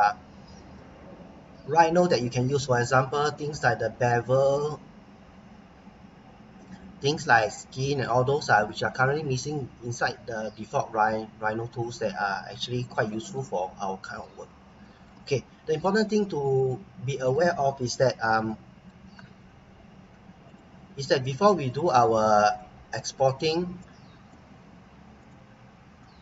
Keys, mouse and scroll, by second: 8.7-9.8 scroll up 1, 9.8-10.4 scroll down 1, 10.4 middle click, 12.4-12.9 scroll up 1, 13.0 middle click, 14.5 scroll down 1, 14.8 shift+middle click, 17.8 Tab, 18.4 middle click, 20.5 click, 23.8 middle click, 25.2 click.